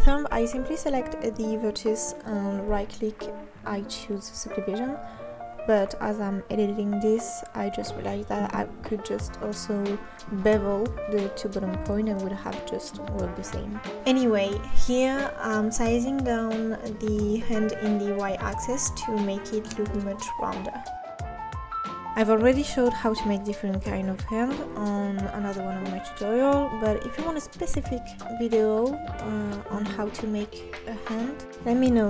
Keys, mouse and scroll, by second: 0.3 click, 0.5 g, 1.1 click, 1.7 e, 2.3 click, 2.7 e, 3.7 click, 4.1 g, 4.7 click, 4.9 g, 5.8 Tab, 5.9-6.6 middle drag, 6.6-7.1 scroll down 2, 7.1 KP_7, 7.4 Tab, 7.9 scroll up 1, 8.0 middle click, 8.8-9.5 scroll down 3, 9.5 click, 9.7 scroll down 1, 9.9 middle click, 10.6-11.3 scroll down 3, 11.3 middle click, 12.0-12.4 drag, 12.9 click, 14.1 s, 15.2 middle click, 16.0 click, 17.2 click, 17.4 s, 18.9 click, 20.0 s, 21.3-23.1 middle drag, 23.6 middle click, 24.4-24.8 scroll down 1, 24.8 click, 25.3 click, 26.1 shift+click, 26.4 shift+click, 27.0 shift+click, 27.2 shift+click, 27.7 middle click, 28.6 s, 29.7 click, 29.9 scroll up 2, 30.1-31.4 middle drag, 31.4 click.